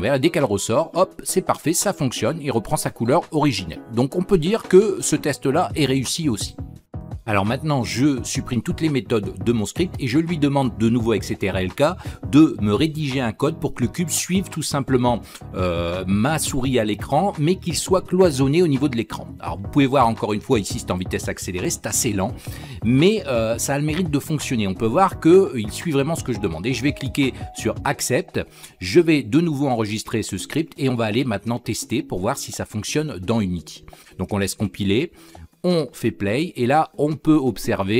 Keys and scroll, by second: 8.9 ctrl+k.